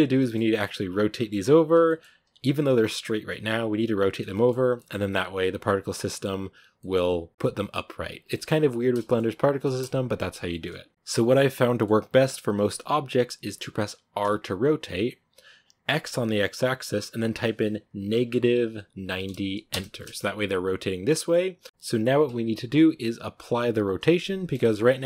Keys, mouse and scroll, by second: 5.8 scroll down 1, 5.9-8.5 middle drag, 8.5-8.9 scroll up 1, 8.9-13.0 shift+middle drag, 13.0-14.1 scroll up 1, 14.1 r, 19.8-24.5 middle drag, 24.5-24.9 scroll up 1, 24.9-25.0 scroll down 2.